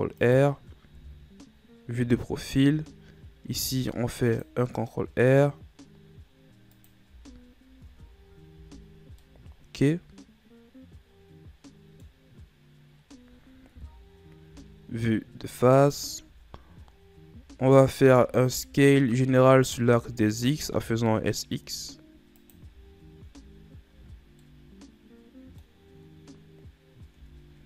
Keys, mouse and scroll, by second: 1.2 KP_3, 3.7 ctrl+r, 7.3 z, 8.1 Tab, 8.7 a, 9.2 scroll down 1, 9.4-12.5 middle drag, 13.9 KP_1, 15.0-15.6 scroll up 2, 15.7-16.0 scroll up 1, 16.0-16.5 right drag, 16.5 Tab, 17.7 z, 18.4 a, 18.7 a, 20.1 s, 22.9 z, 23.5 Tab, 24.2 a, 24.4 scroll down 1, 24.6-26.9 middle drag, 26.9-27.4 scroll up 1, 27.4 Tab.